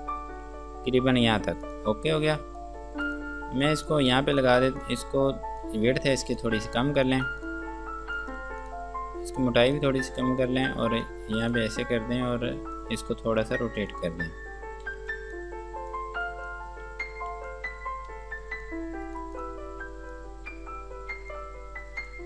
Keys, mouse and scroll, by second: 2.2 scroll down 1, 2.8 click, 3.6 F2, 3.9 click, 5.8 click, 7.3 click, 9.6 shift+click, 10.9 shift+click, 11.7 click, 14.6 scroll down 1, 15.1 F2, 15.3 click, 17.1 F3, 17.7 click, 19.3 right click.